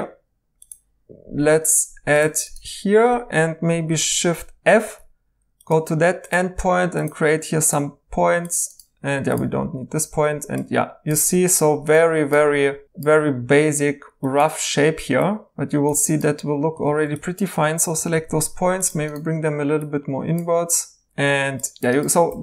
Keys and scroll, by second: 4.8 shift+f, 9.6 x, 16.8 ctrl+z, 17.9 typing, 22.3 2.